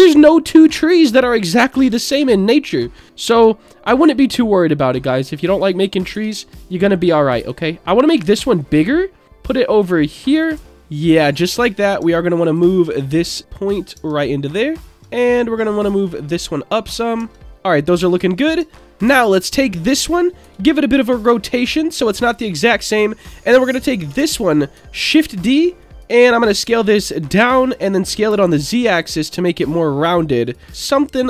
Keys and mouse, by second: 0.0 alt+middle click, 0.4 alt+middle click, 2.1 shift+d, 2.5 click, 4.6 click, 6.1 s, 6.7 click, 7.3 s, 8.6 click, 9.2-10.4 drag, 10.7 Tab, 10.7-11.1 middle drag, 11.8 click, 12.0 Tab, 12.5 click, 13.3-13.9 drag, 13.9 Tab, 14.2-14.8 middle drag, 14.9 Tab, 15.2 click, 15.9 click, 16.9 middle click, 17.2-18.8 Tab, 17.4-17.8 middle drag, 19.2 alt+middle click, 20.4 r, 21.1 click, 21.6 middle click, 24.1 l, 24.9 shift+d, 25.2 click, 25.8 click, 26.6 s, 27.3 click, 28.0 s, 28.3 z, 29.3 click, 30.1 click, 30.9 click.